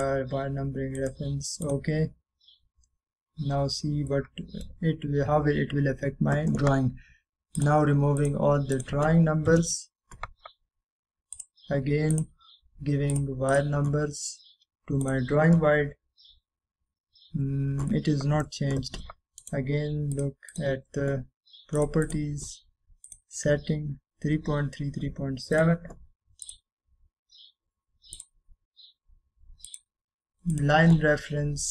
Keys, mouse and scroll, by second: 0.2 click, 3.3-3.7 scroll down 1, 4.1 scroll up 1, 4.8-5.2 scroll down 1, 5.2-5.8 middle click, 6.0 scroll up 1, 7.2-8.7 scroll down 1, 8.7 click, 11.4 Return, 12.5 click, 17.6-18.6 scroll up 1, 18.6-19.0 scroll down 1, 19.0-19.6 middle drag, 20.5 right click, 21.3 click, 26.7 click.